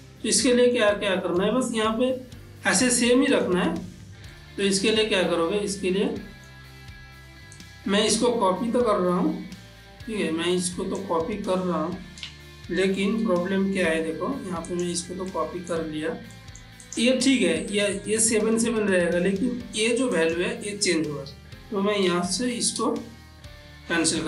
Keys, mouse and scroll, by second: 0.5 middle click, 1.0 middle click, 3.0 middle click, 4.4-6.2 ctrl+middle drag, 6.2-7.6 ctrl+middle drag, 7.6-13.0 drag, 13.0 shift+d, 14.8 click, 15.4 middle click, 16.8 click, 20.2 click, 22.1 click, 22.6 shift+a.